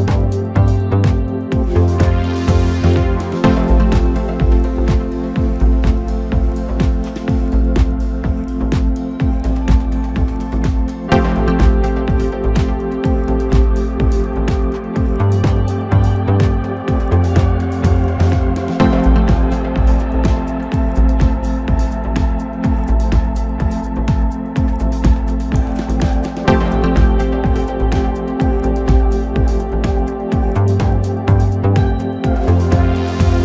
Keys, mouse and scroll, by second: 0.0-0.3 scroll up 1, 0.3 3, 0.7 click, 1.3 shift+click, 2.2 shift+click, 4.1 shift+d, 5.5 p, 6.4 Tab, 7.0 click, 7.9 KP_Divide, 8.1 KP_7, 8.5 Tab, 9.5 2, 9.9 click, 10.4 shift+click, 11.4 x, 13.8-18.3 right drag, 18.3 middle click, 19.2 KP_7, 20.0 ctrl+r, 23.5 ctrl+r, 25.7 ctrl+r, 28.6 KP_Divide, 29.5 KP_7, 31.2 click, 32.0-32.8 scroll up 2, 32.8 1.